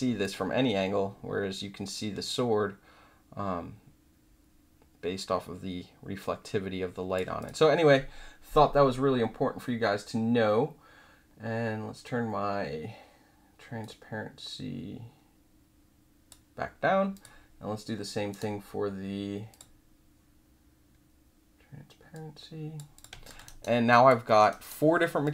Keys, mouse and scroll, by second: 0.2-7.1 alt+drag, 7.3 click, 13.8-16.2 drag, 16.2 middle click, 17.1 click, 17.2 middle click, 18.3 right click, 19.5 click, 22.1-22.7 drag, 22.9 click, 23.4 alt+right click, 23.8 alt+click, 24.2 alt+middle click, 24.5 alt+right click, 25.2 click.